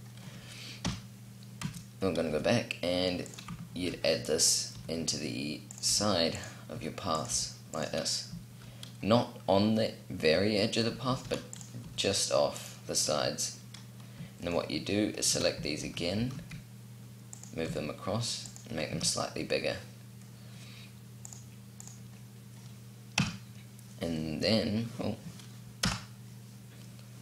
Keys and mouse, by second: 0.5 KP_7, 1.3 z, 2.0 g, 3.4 shift+d, 4.4 r, 5.5 g, 6.5 r, 7.4 g, 10.7 shift+d, 11.5 r, 15.5 shift+d, 17.3 s, 18.7 a, 22.8 KP_Decimal, 25.5 KP_0.